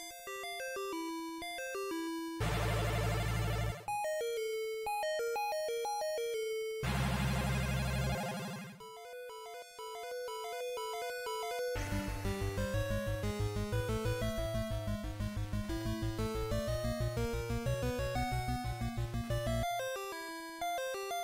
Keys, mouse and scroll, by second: 0.8 click, 1.7 e, 6.8 click, 7.6 middle click, 11.3 e, 12.6 click, 13.6 alt+m, 18.0 Tab, 18.0-18.6 scroll down 1, 18.8-19.4 scroll down 1, 19.4-20.1 scroll down 3, 20.1-20.8 scroll down 1, 20.8-21.1 scroll down 1.